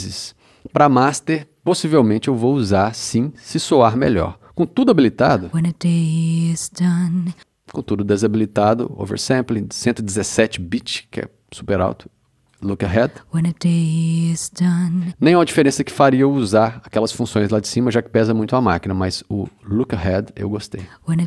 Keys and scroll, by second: 5.2 space, 7.3 space, 13.0 space, 15.0 space.